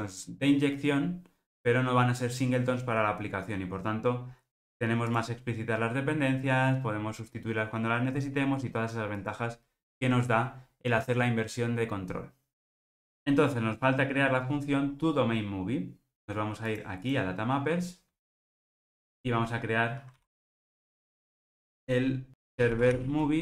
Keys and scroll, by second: 20.2 super+c, 21.0 super+v.